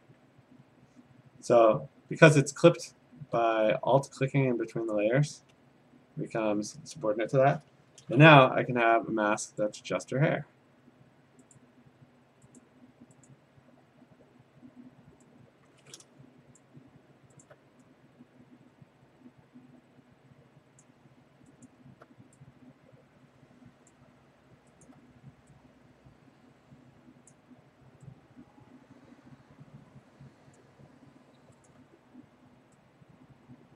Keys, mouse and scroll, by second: 4.3 alt+click, 5.0 alt+click, 9.6 click, 11.6 click, 12.6 click, 13.3 click, 16.6 click, 17.4 alt+click, 20.8 click, 21.7 alt+click, 23.9 click, 24.9 alt+click, 27.3 click, 28.9 click, 31.7 alt+click.